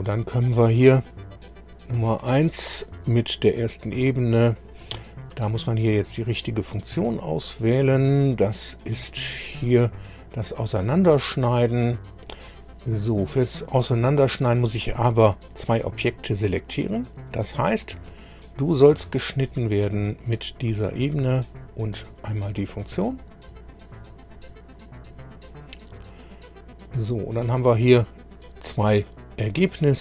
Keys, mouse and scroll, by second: 0.9 click, 7.3 click, 8.9 click, 9.4 click, 10.7 click, 12.1 click, 18.3 click, 20.6 ctrl+click, 22.6 click, 26.7 click, 27.3 scroll down 1.